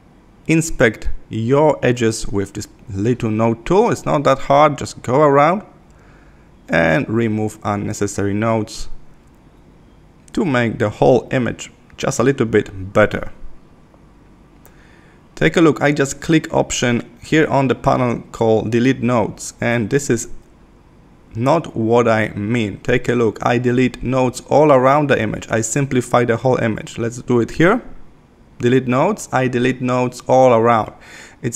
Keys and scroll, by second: 6.3 Left, 17.8 super+-, 20.3 super+-.